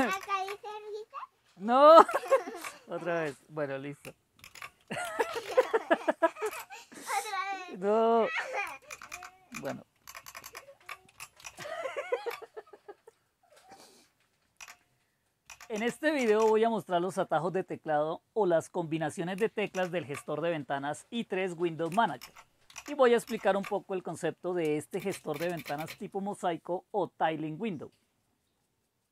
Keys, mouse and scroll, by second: 0.1 super+Right, 4.4 super+d, 4.7-5.9 typing, 6.5 Return, 8.9 super+Left, 9.1 super+Left, 9.5 super+Left, 10.1 super+Right, 10.2 super+Right, 10.4 super+Right, 11.6 shift+super+Down, 14.6 Down, 15.5 Down, 15.7 Down, 16.2 Down, 16.4 Down, 19.7 super+Down, 22.3 super+Up, 22.7 super+Down, 23.2 super+Up, 25.0-25.8 typing.